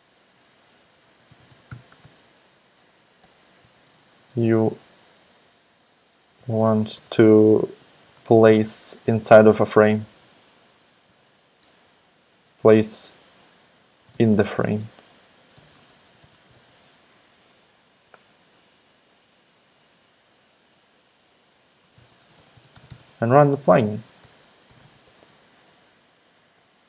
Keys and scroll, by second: 0.9-11.6 typing, 3.2 Return, 12.5 alt+BackSpace, 13.7-17.8 typing, 18.1 alt+Right, 18.3 alt+Right, 19.1 alt+Left, 19.3 alt+Left, 19.6 alt+Right, 21.5-25.6 typing.